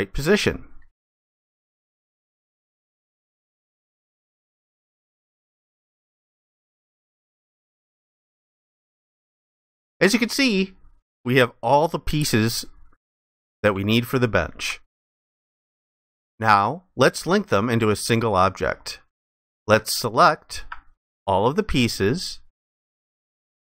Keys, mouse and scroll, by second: 4.1 alt+click, 8.1 alt+click, 13.9 ctrl+alt+click, 21.9 shift+click.